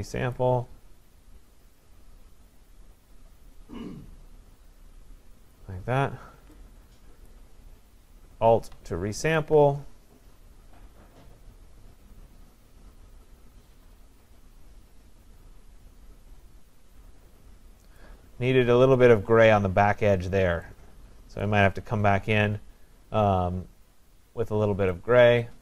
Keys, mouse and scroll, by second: 5.6-7.2 click, 6.9 click, 7.3 click, 7.4 click, 9.4-10.1 alt+click, 18.0 click, 21.4 click.